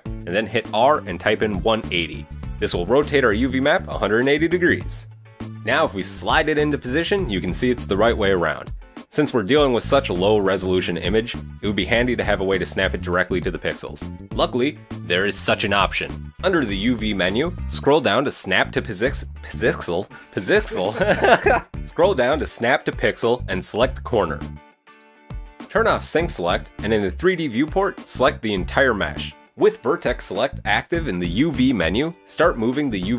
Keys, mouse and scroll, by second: 0.6 r, 6.8 g, 15.0 click, 24.3-25.0 scroll up 4, 24.5 shift+middle click, 25.0 right click, 25.0-25.5 scroll down 2, 25.6 click, 27.1 a, 30.1 click, 30.5 right click, 30.8 shift+middle click, 31.2 shift+right click, 31.4 shift+middle click, 31.7 scroll up 1, 32.2 g, 32.7 scroll down 3.